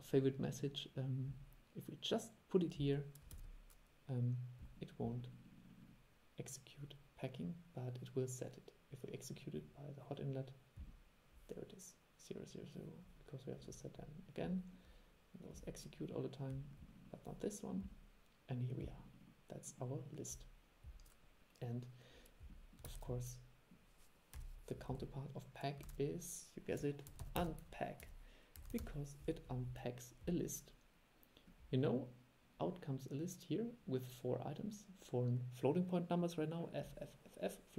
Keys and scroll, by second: 3.4 super+e, 23.0 super+e, 26.0 super+1.